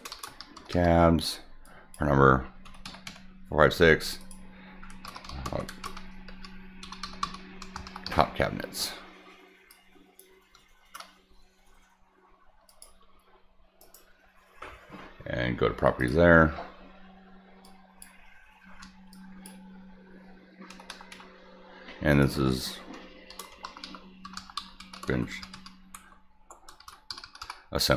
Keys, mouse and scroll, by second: 0.0-1.2 typing, 1.6 click, 4.2 click, 5.2-8.5 typing, 9.7 click, 10.8 shift+c, 12.7 click, 13.8 right click, 16.0 click, 17.6 click, 18.7 shift+w, 19.1 click, 22.1 click, 23.1-27.1 typing.